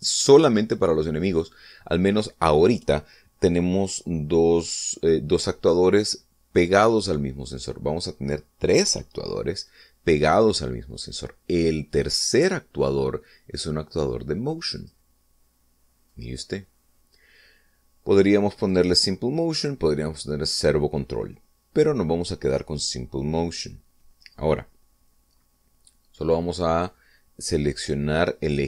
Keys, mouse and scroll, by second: 13.1 click, 15.9 click, 17.2-18.4 drag, 19.7 click.